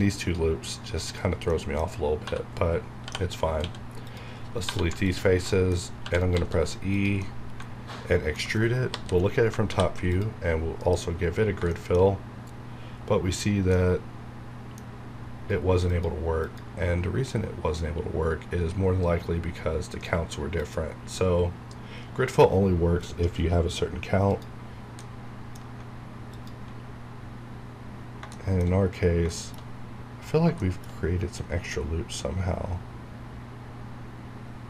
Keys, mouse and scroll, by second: 0.8 scroll up 1, 1.5 middle click, 2.7-3.5 typing, 4.6 click, 4.7 1, 5.0 alt+click, 5.5 alt+middle click, 6.0 e, 6.2 right click, 6.3 s, 6.9 click, 7.2-8.8 middle drag, 8.8 KP_7, 9.7 ctrl+f, 10.1 click, 10.8 F9, 11.7 shift+middle click, 12.4 scroll down 1, 13.3 scroll up 1, 13.7-15.8 middle drag, 15.8 click, 20.5 click, 20.6 click, 24.3 click, 24.9 scroll down 1, 25.0 middle click, 26.3 alt+click, 26.8 scroll down 1, 28.3 shift+middle click, 28.6 shift+scroll down 1, 29.3 shift+middle click, 29.8-30.3 scroll up 1, 30.4 scroll down 1, 30.6 shift+middle click, 31.0 scroll up 1, 33.1 scroll down 1, 33.6 scroll up 1.